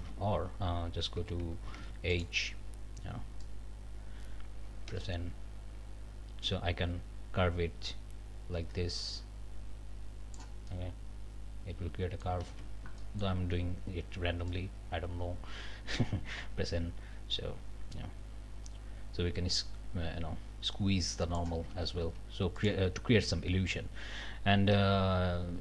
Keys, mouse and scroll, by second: 0.0 ctrl+z, 1.2 2, 1.8 alt+a, 2.1 alt+click, 3.4-5.5 drag, 4.9 n, 12.5 ctrl+z, 15.9 n, 21.7 ctrl+z, 22.6 click, 23.7-25.6 drag, 24.7 n.